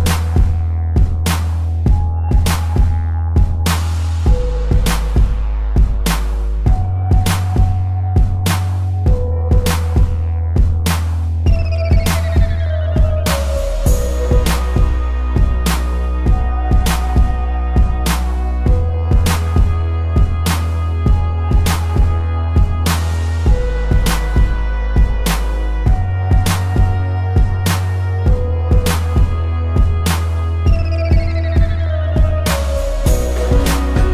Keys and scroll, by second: 2.0 ctrl+z, 2.9 space, 7.7 space, 8.7 space, 10.6 ctrl+z, 11.2 ctrl+z, 18.4 space, 19.4 ctrl+z, 21.4 space, 28.2 ctrl+z, 31.3 a, 31.8 space, 33.2 ctrl+-, 33.9 space.